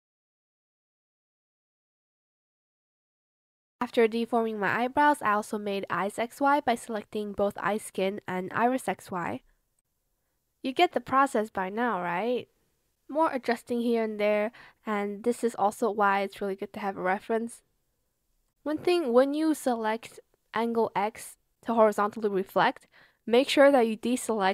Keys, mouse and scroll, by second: 1.3 shift+click, 1.5 shift+click, 1.9 ctrl+shift+z, 2.0 shift+click, 3.3 shift+click, 6.1 shift+click, 6.6-8.0 typing, 10.3 shift+click, 10.7 ctrl+z, 10.9 shift+click, 11.1 ctrl+z, 11.9 shift+click, 12.0 ctrl+z, 12.8 shift+click, 13.9 shift+click, 14.2 ctrl+z, 14.4 shift+click, 14.8 shift+click, 15.6 ctrl+z, 15.8 ctrl+click, 19.5 space.